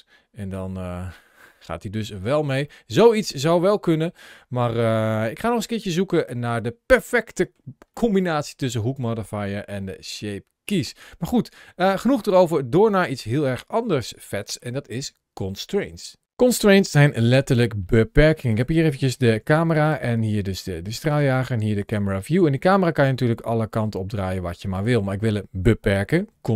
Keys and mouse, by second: 0.3-2.1 drag, 2.5-3.9 middle drag, 4.7 shift+middle click, 5.2-7.4 middle drag, 7.8 shift+middle click, 8.3-14.5 middle drag, 19.1 g, 19.6 right click, 20.4 click, 20.6 g, 20.9 click, 21.7 click, 21.8 g, 24.5 click.